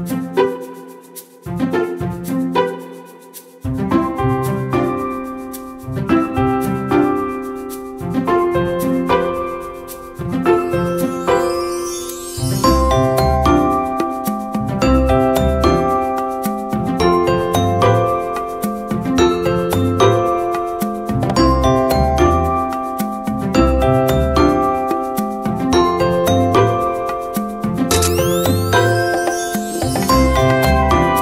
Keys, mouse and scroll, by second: 0.4 scroll up 1, 1.8 click, 4.3-5.3 scroll down 1, 7.9 click, 11.0 click.